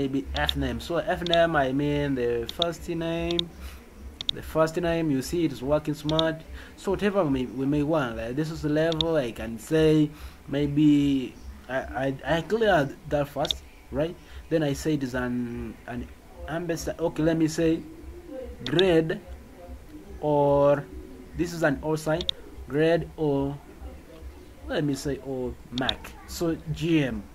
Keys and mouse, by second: 0.3 click, 1.2 click, 2.4 click, 3.2 click, 4.2 click, 13.4 click, 18.6 click, 22.2 click, 25.7 click.